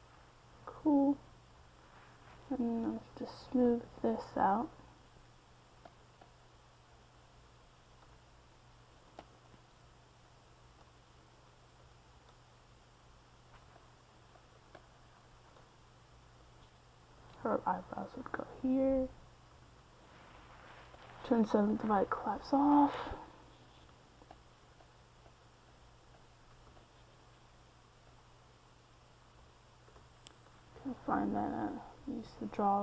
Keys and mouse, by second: 3.1-4.9 drag, 4.9-7.2 middle drag, 7.2-9.3 drag, 9.3-12.3 middle drag, 12.9-14.6 middle drag, 13.6 c, 14.6 f, 20.1-24.4 middle drag, 25.2-27.9 drag, 27.9 middle click, 29.8-31.5 drag, 31.5 ctrl+z.